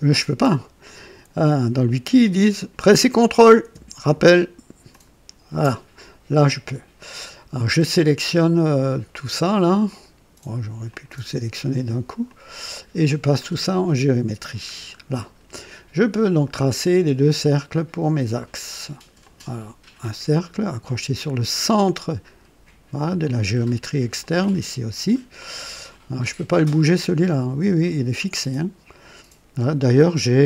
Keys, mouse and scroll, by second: 4.8 ctrl+click, 6.6 right click, 8.7 click, 9.8 click, 10.8 click, 12.2 click, 13.3 click, 14.5 scroll down 1, 16.7 click, 19.1 click, 20.2 click, 23.1 click, 24.1 click, 25.0 right click, 26.8-28.0 drag, 30.3-30.4 scroll down 2.